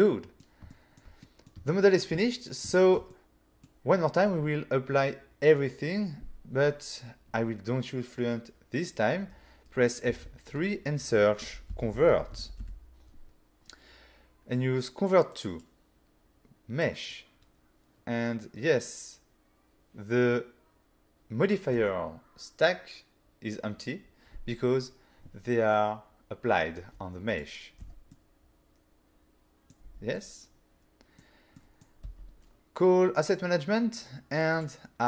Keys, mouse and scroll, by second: 0.8 ctrl+middle click, 1.3 middle click, 1.7 shift+middle click, 2.8 shift+middle click, 3.1 middle click, 10.2 F3, 11.5-12.7 typing, 15.4 click, 16.9 click, 27.4 click, 27.8 Tab, 28.2 middle click, 29.9 Tab, 30.2 middle click, 31.6 middle click, 32.1 n, 34.6 click.